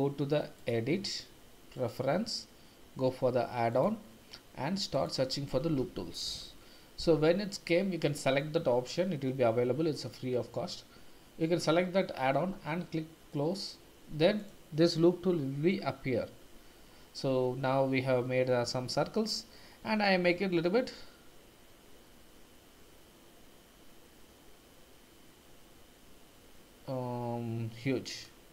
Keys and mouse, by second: 0.5-1.9 drag, 14.5-16.3 drag, 19.8 s, 28.1 click.